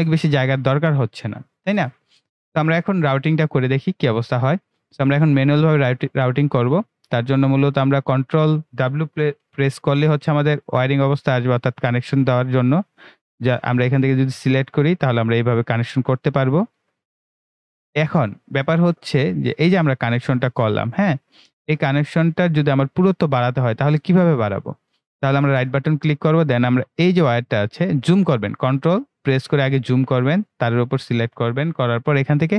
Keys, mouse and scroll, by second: 4.0-4.3 scroll up 1, 10.0 ctrl+w, 14.7 click, 24.8 right click, 27.3 click, 29.0 ctrl+scroll up 1, 30.6 click.